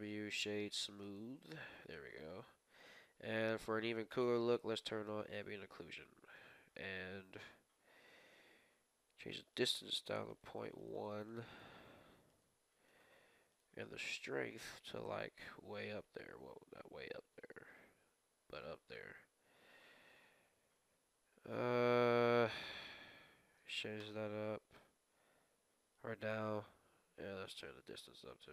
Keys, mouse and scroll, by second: 1.7 Tab, 2.0 middle click, 3.9 click, 4.8 Tab, 4.8 click, 5.0-8.1 middle drag, 5.3-6.7 drag, 9.5 click, 10.4-12.9 drag, 13.2-16.8 drag, 19.8-21.4 drag, 27.3-28.5 drag.